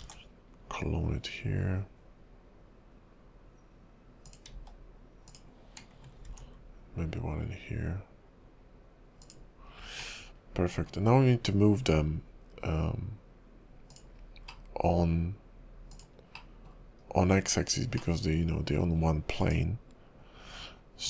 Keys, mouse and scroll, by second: 0.2 alt+d, 4.5 s, 6.4 alt+d, 10.1 scroll up 1, 10.3 middle click, 11.1-12.7 scroll down 1, 13.9 click, 14.7 middle click, 16.0 click, 16.3 middle click, 17.0 KP_5, 17.3-18.0 scroll up 3, 18.0 middle click, 19.4 click.